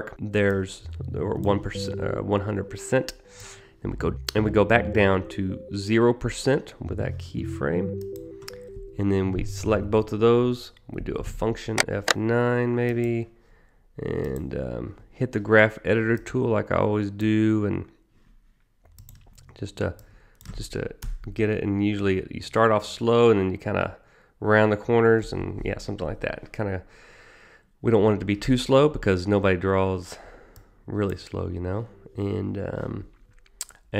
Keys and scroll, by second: 10.7 F9.